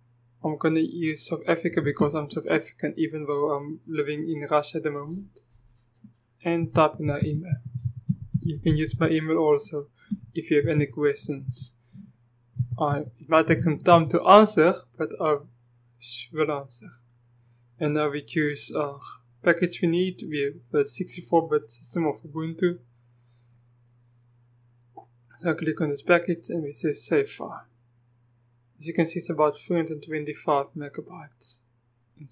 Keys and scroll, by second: 1.8 typing, 6.4-9.0 typing, 10.1-13.9 typing.